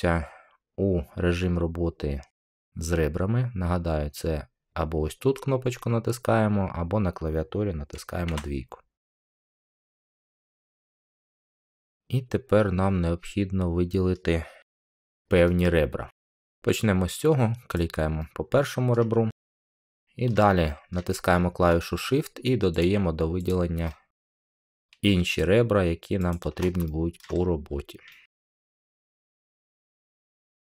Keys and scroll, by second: 8.2 2.